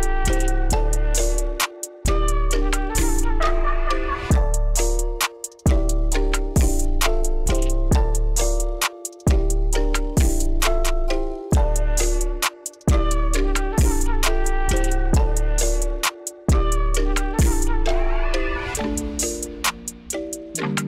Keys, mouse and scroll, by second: 0.9 Escape, 3.6 click, 6.1 click, 8.7 click, 9.9 click, 10.6 KP_1, 10.9 Return, 14.4 click, 16.9 click.